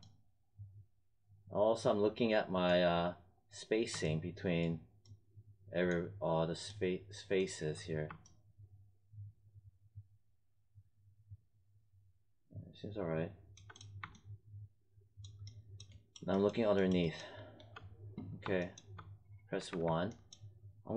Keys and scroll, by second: 19.5 1.